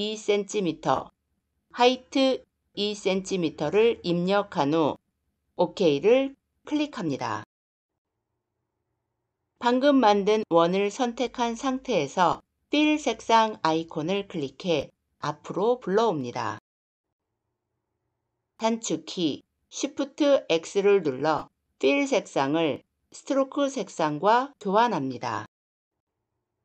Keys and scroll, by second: 19.7 shift+x.